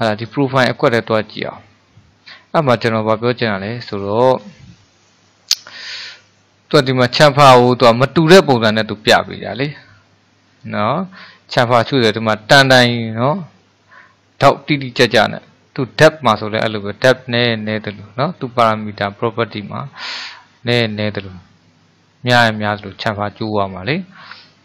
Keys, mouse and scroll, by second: 0.3 click, 1.3-4.5 middle drag, 4.5 scroll up 1, 9.1-12.2 drag, 15.2-18.3 drag.